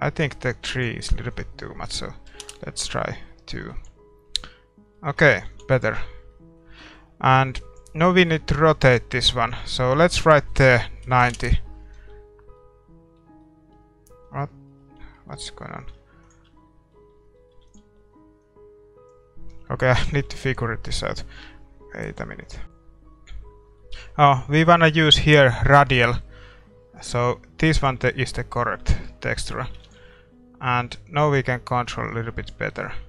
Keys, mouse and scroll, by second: 2.4 ctrl+s, 4.3 ctrl+s, 4.9-11.3 middle drag, 5.4 ctrl+s, 11.3 click, 12.3-19.3 middle drag, 16.2-22.6 drag, 18.5 ctrl+s, 28.4-31.3 middle drag, 29.8 ctrl+s, 29.8-33.0 drag.